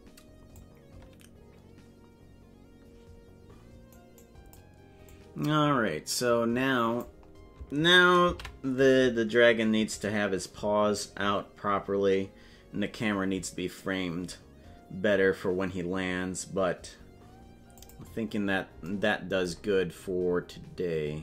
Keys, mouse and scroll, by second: 0.6-4.4 drag, 5.1-7.1 drag, 17.8 click, 19.6 scroll down 1, 20.2 scroll down 7.